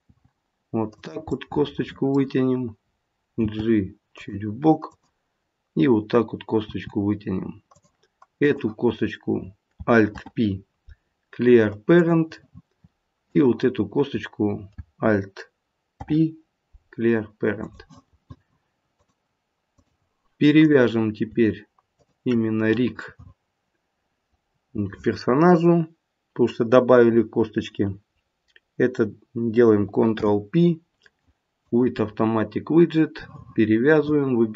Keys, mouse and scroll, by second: 0.1 e, 1.3 middle click, 3.4 g, 4.8 click, 6.7 e, 8.3 click, 10.0 alt+p, 15.9 alt+p, 18.9 click, 20.6 click, 21.9 shift+click, 30.1 ctrl+p.